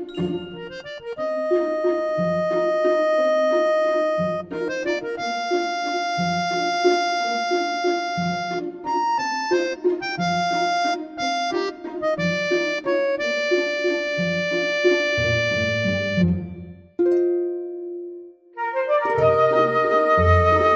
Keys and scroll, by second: 0.0 ctrl+c, 0.3 ctrl+shift+v, 1.4 ctrl+c, 1.6 ctrl+shift+v, 2.2 ctrl+c, 2.9 ctrl+shift+v, 3.7 ctrl+c, 3.9 ctrl+v, 5.6 Delete, 6.0 ctrl+shift+c, 6.2 ctrl+v.